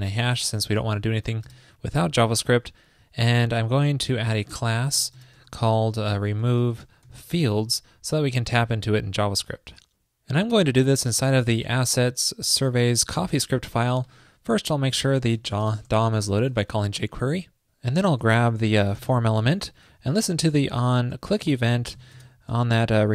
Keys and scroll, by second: 8.3 super+s, 19.6 super+Right.